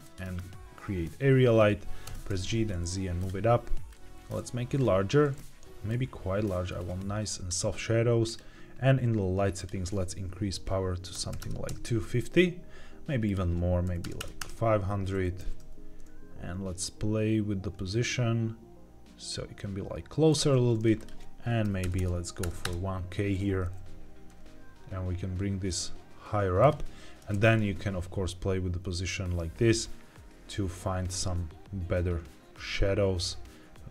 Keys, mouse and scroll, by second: 3.1 click, 3.8-5.8 drag, 8.2 click, 9.5-11.6 drag, 13.1-14.3 drag, 14.1 KP_0, 15.3 g, 15.5 z, 20.2 click, 20.9-22.6 drag, 21.9 KP_0, 23.5 g, 23.7 z, 26.5 click, 26.8 g, 27.2 shift+z.